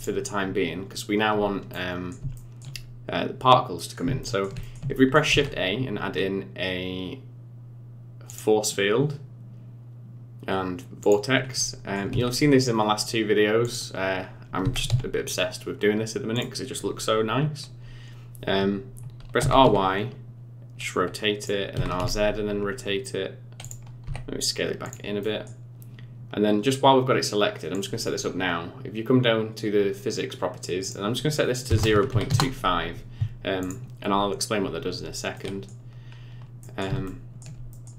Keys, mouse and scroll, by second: 1.7 middle click, 2.3 shift+middle click, 3.7 middle click, 4.2 shift+middle click, 4.6 middle click, 4.9 shift+middle click, 5.2 shift+a, 11.5 middle click, 12.1 s, 14.8 g, 19.3 r, 21.7 r, 24.0 s, 25.2 middle click, 27.7 click, 30.8 click, 33.5 click, 35.3 middle click, 36.1-36.6 scroll up 3, 36.6 middle click, 37.0 shift+middle click, 37.6 middle click.